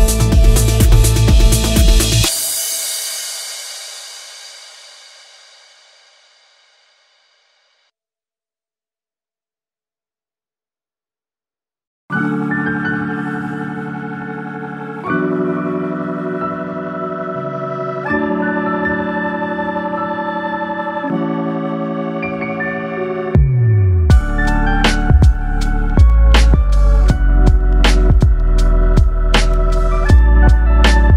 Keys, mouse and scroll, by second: 1.3 click, 1.6 click, 9.6 scroll down 1, 10.0 middle click, 11.7-12.7 scroll up 1, 12.7 Tab, 13.3 scroll up 1, 15.2 ctrl+r.